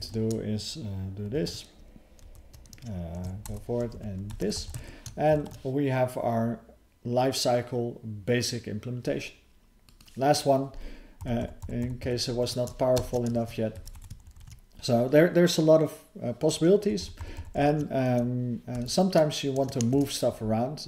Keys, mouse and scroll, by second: 2.2 alt+f, 4.3 BackSpace, 5.3 ctrl+s, 9.5 ctrl+v, 9.5 click, 13.0 ctrl+alt+space, 13.4 ctrl+w, 13.7 BackSpace, 14.4 ctrl+s, 18.7 alt+f.